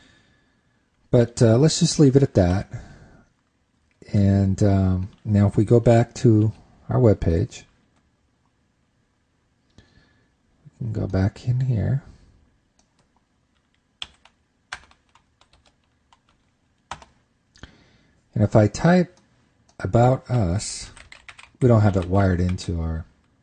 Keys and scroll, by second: 2.8 super+s, 7.0 super+Tab.